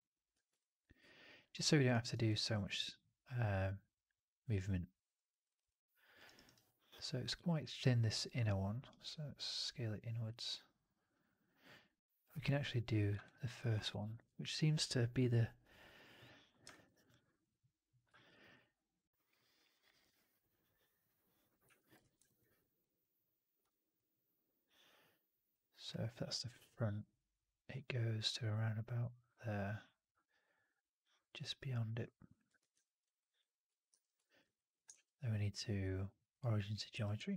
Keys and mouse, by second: 0.2 w, 0.5-1.7 alt+drag, 1.8 alt+right drag, 2.2-5.0 alt+drag, 5.2 alt+middle drag, 5.4 alt+right drag, 5.6-6.1 alt+drag, 6.1 alt+right drag, 6.3 alt+right drag, 6.6-7.2 alt+drag, 13.1 alt+click, 13.5 alt+middle click, 13.7 alt+right click, 13.9 alt+click, 16.6 alt+middle drag, 16.8 alt+right drag, 17.0 alt+click, 18.0 alt+middle click, 18.2 alt+right click, 18.4-21.3 alt+drag, 21.5 1, 21.9 shift+x, 22.1 alt+middle click, 23.5 w, 24.9 click, 32.5 shift+x, 32.7 alt+middle click, 32.9 alt+right click, 33.3 alt+click, 33.8 4, 34.1 alt+middle drag, 34.3 alt+right drag, 34.8 shift+Tab, 36.8 f, 37.1-37.3 alt+drag.